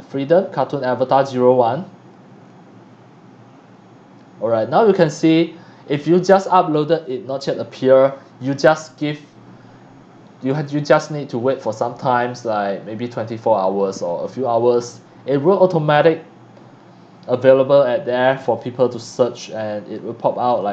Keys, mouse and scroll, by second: 1.1 click, 4.4 scroll down 1, 8.9 click, 10.6 click, 12.2 click, 15.3 click.